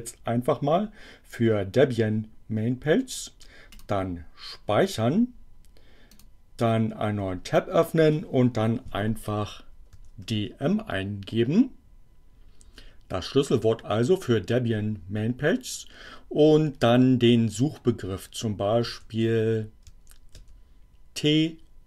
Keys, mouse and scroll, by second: 3.7 click, 6.1 click, 9.9 d, 10.3 m, 12.7 space, 18.8 t, 19.9 a, 20.4 c.